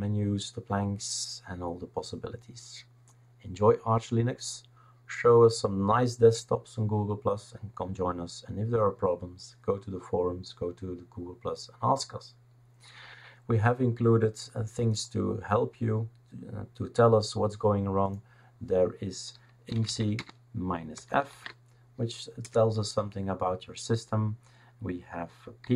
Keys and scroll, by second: 19.4-21.2 typing, 22.4 Return, 25.4-25.7 typing.